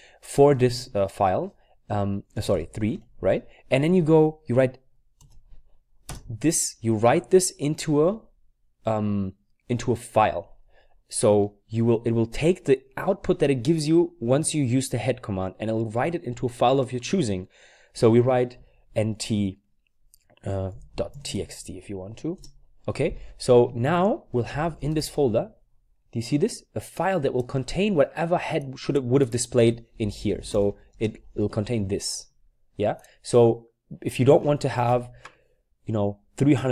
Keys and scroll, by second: 0.4-2.9 typing, 5.2-6.8 typing, 18.6-19.0 typing, 20.5-21.8 typing, 22.3 Return, 24.4-25.2 typing, 29.8-31.0 typing.